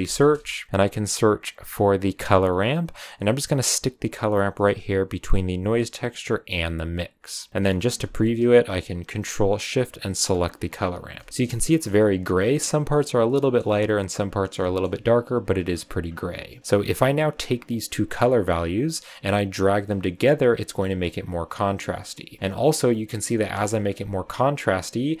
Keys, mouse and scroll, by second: 7.1 click, 7.6-9.9 middle drag, 9.9 ctrl+shift+click, 10.3 click, 10.8 scroll down 2, 11.1-16.8 shift+middle drag, 11.8-13.1 scroll up 4, 13.1 scroll up 1, 13.7-14.5 scroll up 1, 15.6-16.3 scroll up 2, 16.3-16.8 scroll up 4, 17.2-20.0 drag, 20.0-21.4 scroll down 1, 21.4-22.3 drag, 22.3 shift+middle click, 22.4-23.4 scroll down 2, 23.4-24.5 shift+middle drag, 24.5-25.2 drag.